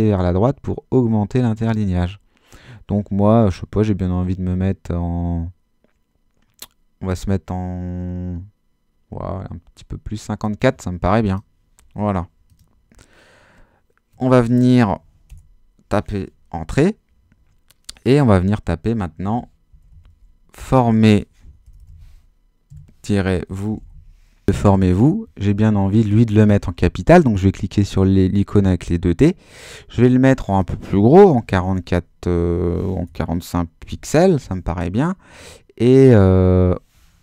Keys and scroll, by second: 15.3 Return, 19.0-24.4 typing, 31.3 4, 33.1 BackSpace, 33.9 5.